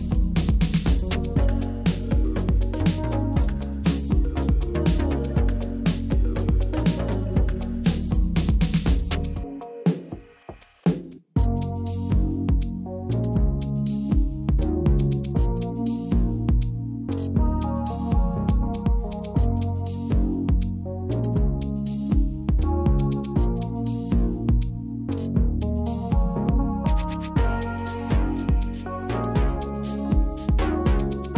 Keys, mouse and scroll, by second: 0.7 e, 0.9 Escape, 1.4 s, 2.9 click, 3.9 e, 4.1 Escape, 4.6 s, 5.3 click, 6.0 g, 6.3 z, 7.2 click, 7.9 e, 8.0 Escape, 8.1 s, 8.9 click, 9.2 f, 9.5 middle click, 9.6 click, 10.1 click, 11.0-12.2 middle drag, 12.5 KP_1, 13.6 click, 15.4 click, 15.8 click, 17.2 r, 17.8 shift+x, 19.6 shift+y, 22.0 click, 22.5 g, 22.8 z, 24.1 click, 24.4 middle click, 24.6 click, 25.3-26.9 middle drag, 27.8-29.3 middle drag, 29.6 KP_1, 30.3 shift+middle drag, 31.0 Tab.